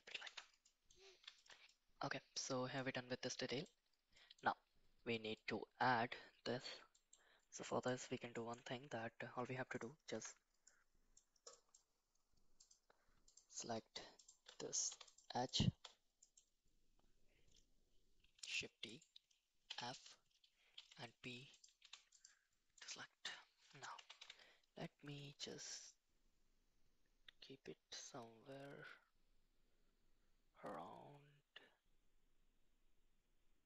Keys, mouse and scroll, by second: 0.2 Tab, 0.6 middle click, 1.3 shift+middle click, 1.6-2.7 middle drag, 3.2-3.6 middle drag, 4.1 middle drag, 5.3 middle click, 6.9 middle click, 7.6 middle click, 8.3 shift+middle click, 10.1 Tab, 10.6 middle click, 11.4 middle click, 12.6 click, 13.2 alt+click, 14.1 alt+click, 14.8 2, 15.0 click, 16.2 middle click, 18.4 shift+d, 19.6 f, 20.7 p, 21.8 Tab, 22.1 click, 22.7-23.2 middle drag, 23.9 g.